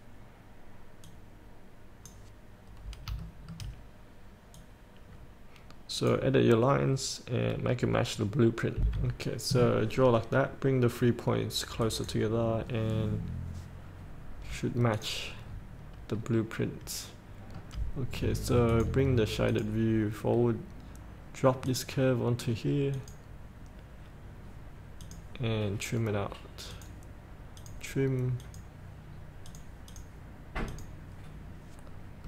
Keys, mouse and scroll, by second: 3.0-3.4 scroll up 1, 3.4 shift+middle click, 4.8-7.0 drag, 7.2-7.9 scroll down 1, 9.0 F8, 9.4-12.1 scroll down 1, 12.1 click, 12.9-13.3 scroll down 1, 13.3-15.1 scroll up 1, 15.1 click, 15.7 scroll up 1, 16.6-17.8 middle drag, 18.9 click, 20.6-21.9 scroll down 1, 21.9-27.8 drag, 31.6-32.2 scroll up 1.